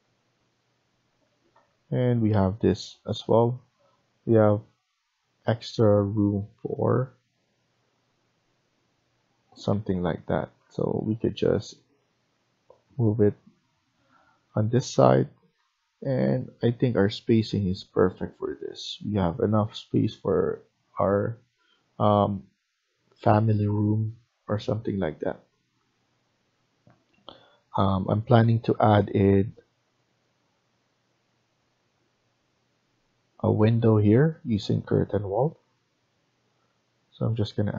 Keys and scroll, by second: 0.1 Right, 1.2 Escape, 1.4 Escape, 10.1 Up, 10.5 Up, 10.5 Left, 12.1 Up, 12.1 Right, 12.8 Right, 13.2 Escape.